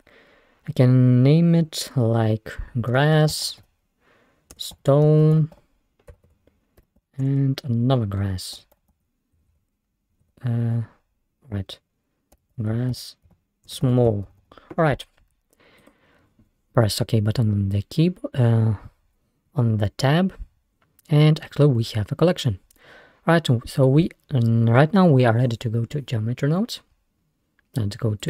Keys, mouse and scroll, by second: 3.6 s, 6.3 BackSpace, 9.5 BackSpace, 14.4 l.